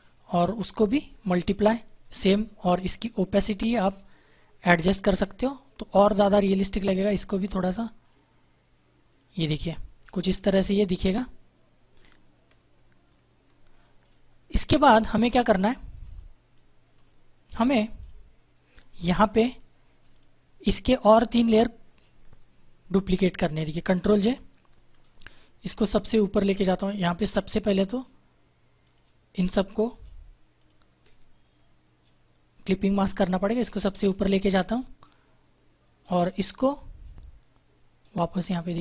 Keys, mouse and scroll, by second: 0.8 click, 10.4 -, 11.9 click, 14.4 click, 23.7 ctrl+j, 24.8-26.7 scroll up 1, 28.8 alt+click, 33.0 click.